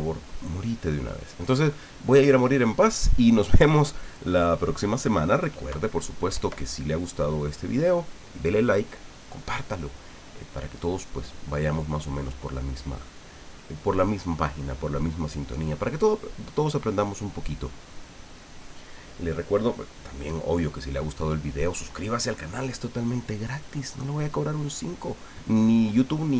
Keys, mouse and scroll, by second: 2.5 ctrl+scroll up 1.